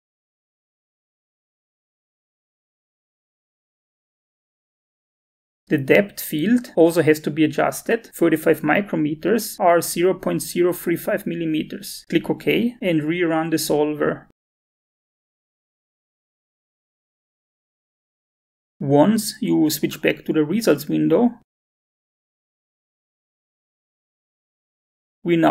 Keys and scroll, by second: 6.8-8.1 typing, 12.6 5.